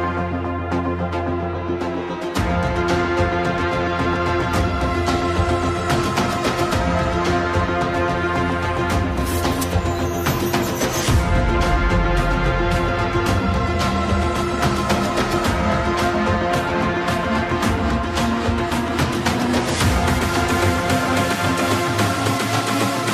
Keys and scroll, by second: 9.2 Return.